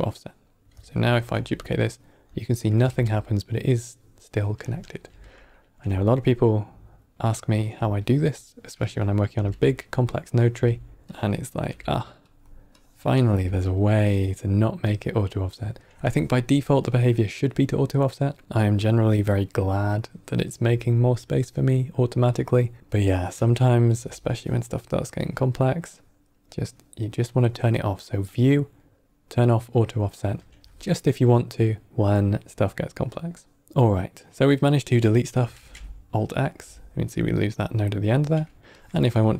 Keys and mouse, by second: 1.1 shift+d, 2.7 g, 5.0 typing, 7.1-7.5 alt+right drag, 8.7 drag, 9.2 g, 10.3 click, 10.4 g, 11.0-11.6 drag, 11.6 g, 12.6 drag, 13.1 g, 14.0-14.3 drag, 14.8 click, 16.8-18.2 drag, 19.0-19.9 drag, 21.3 click, 22.8 middle click, 23.5 ctrl+middle click, 25.1-25.7 drag, 28.2-29.8 drag, 35.5 alt+x, 38.7-39.2 drag.